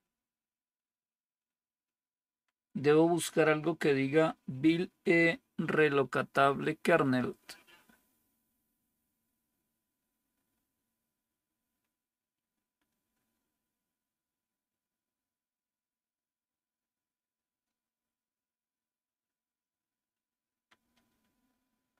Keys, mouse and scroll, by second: 0.3 Down, 0.5 Down, 0.8 Down, 1.5 Down, 1.7 Down, 5.6 Down, 5.9 Down, 6.1 Down, 6.4 Down, 6.8 Down, 7.1 Down, 7.3 Down, 7.5 Down, 7.7 Down, 7.8 Down, 8.1 Down, 8.3 Down, 8.5 Down, 8.9 Down, 9.9 Down, 10.2 Down, 10.4 Down, 11.1-12.2 Down, 20.4 Down, 20.7 Down, 21.0 Down.